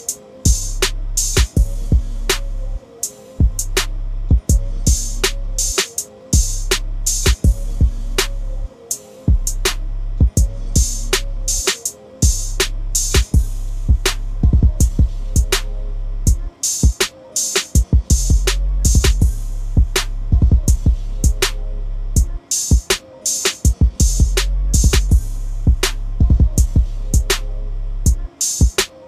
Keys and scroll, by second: 18.2 Delete, 19.6 Return, 28.0 ctrl+z.